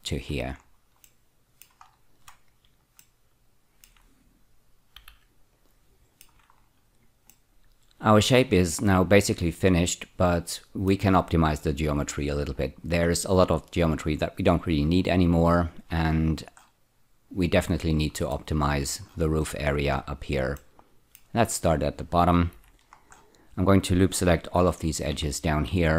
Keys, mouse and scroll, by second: 0.5-1.1 scroll down 3, 1.1 middle click, 1.8-2.3 scroll down 2, 3.0 middle click, 5.0 z, 5.5 click, 6.0 shift+middle click, 6.5-6.9 scroll up 3, 7.3-11.1 middle drag, 18.3 middle click, 20.6 middle click, 21.8-22.5 scroll up 1, 22.5 2, 22.9-24.7 scroll up 1, 25.1-25.9 typing.